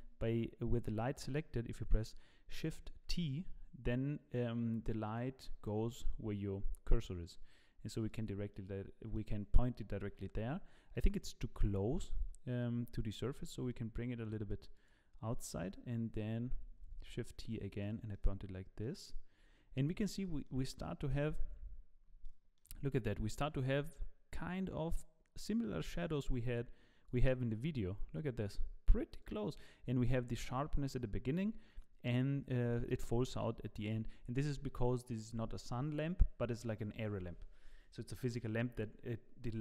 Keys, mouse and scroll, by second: 3.1 shift+t, 8.5 middle click, 10.0 KP_7, 11.7-13.0 scroll down 2, 13.0-13.5 scroll down 1, 13.5 g, 17.0 shift+t, 18.1 middle click, 19.4 scroll up 4, 20.2 middle click, 20.2 scroll up 2, 21.1 KP_0, 21.9-22.2 scroll up 2, 22.2 shift+middle click.